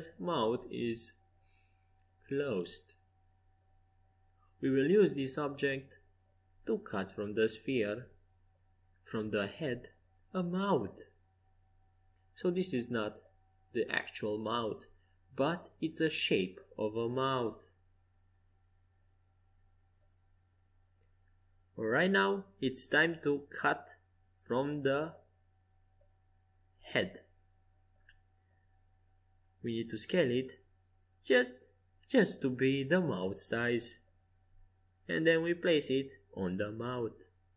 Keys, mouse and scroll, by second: 0.6 right click, 1.4 middle click, 1.6-3.5 right drag, 2.7 click, 3.5 middle click, 4.4-6.0 right drag, 8.7 f, 10.1 z, 10.6-13.3 middle drag, 12.8-14.6 right drag, 13.3-15.6 drag, 14.1-17.1 middle drag, 17.6 middle click, 18.4-22.1 typing, 21.3 middle click, 23.9 Tab, 27.2 s, 28.1 Escape, 29.1 right click, 30.5 s, 33.6-35.6 drag, 35.3 g, 36.8 middle click.